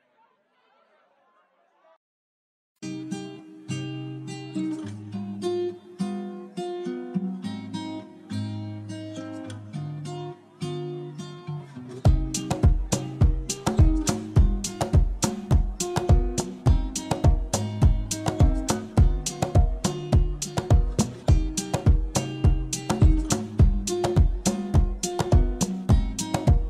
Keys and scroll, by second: 8.9 ctrl+d, 9.9 d, 10.5 u.